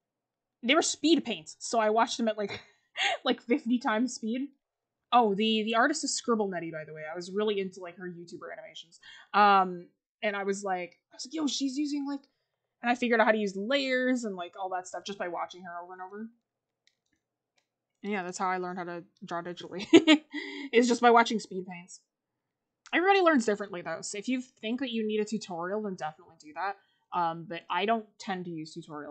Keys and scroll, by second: 18.3 ctrl+z.